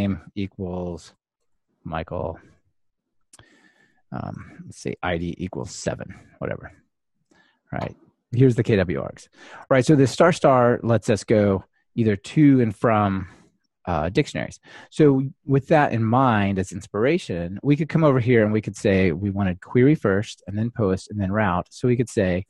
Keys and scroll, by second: 6.9 ctrl+r, 16.3 super+/.